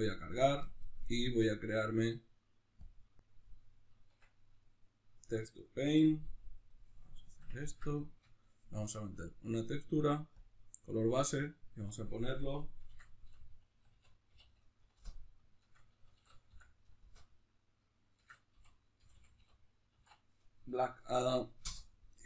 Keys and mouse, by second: 5.4 Tab, 6.6 click, 7.3-21.7 shift+middle drag, 21.7-22.2 drag, 21.7 f.